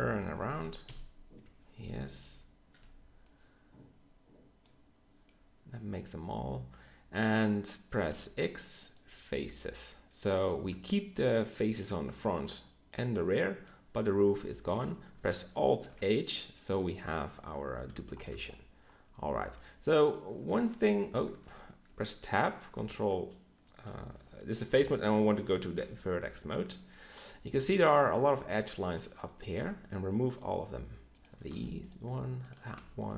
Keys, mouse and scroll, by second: 0.0-2.7 typing, 8.1 x, 14.3 Tab, 15.8 alt+h, 19.8 middle click, 20.0 middle click, 20.5 ctrl+Tab, 21.3 ctrl+Tab, 21.9 Tab, 25.6 ctrl+Tab, 29.6 x, 31.5 x, 32.8 x.